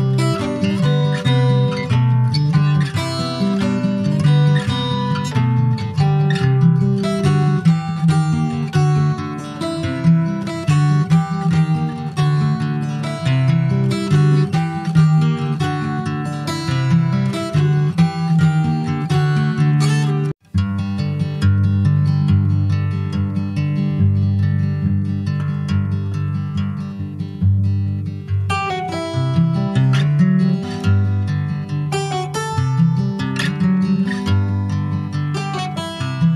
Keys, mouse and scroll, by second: 0.4 alt+middle click, 0.7 alt+middle click, 1.7 ctrl+s, 1.9 click, 3.5 click, 4.6 shift+click, 5.3 /, 5.8 middle click, 6.0 click, 6.6 ctrl+s, 7.1 shift+middle click, 7.5 click, 8.3 click, 9.6 alt+middle click, 10.9 click, 11.8 s, 13.8 click, 14.9 s, 16.6 click, 18.6 s, 21.0 click, 22.0 middle click, 22.6 ctrl+s, 22.9 click, 23.3 click, 25.6 alt+middle click, 26.1 alt+middle click, 26.7 alt+middle click, 28.0 ctrl+s, 28.1-29.6 middle drag, 29.6 Tab, 29.8 click, 30.4 middle click, 30.7 s, 32.8 Tab, 33.1 middle click, 33.7 ctrl+s, 33.8 click, 34.2 ctrl+a, 35.3 middle click, 35.7 Tab, 36.0 click.